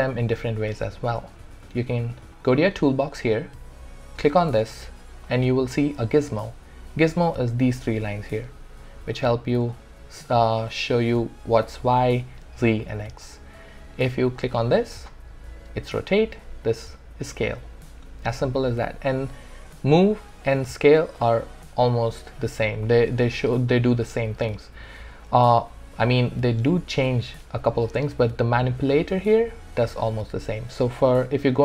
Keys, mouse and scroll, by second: 9.7-13.0 alt+drag, 14.4 click, 21.6 click, 25.3 r.